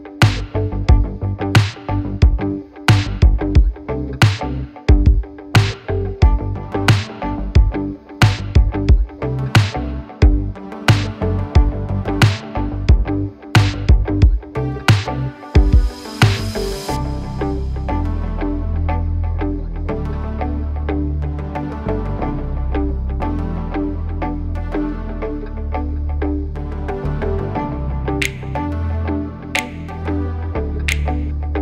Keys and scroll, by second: 0.1 Return, 0.8 space, 1.7 Delete, 3.8 c, 4.6 Up, 6.7 8, 7.2 Return, 8.2 space, 8.8 Delete, 11.5 space, 13.5 m, 15.4 space, 16.5 l, 18.3 l, 19.5 space, 29.6 space.